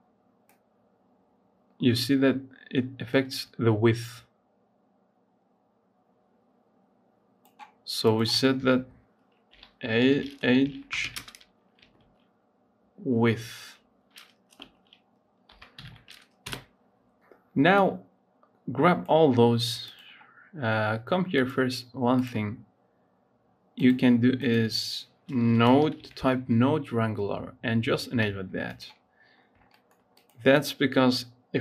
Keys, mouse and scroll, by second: 7.9 click, 8.4 F2, 19.7 click, 22.1-25.6 drag, 29.2-29.5 scroll up 2, 29.5 shift+middle click, 30.0 click, 30.3 click.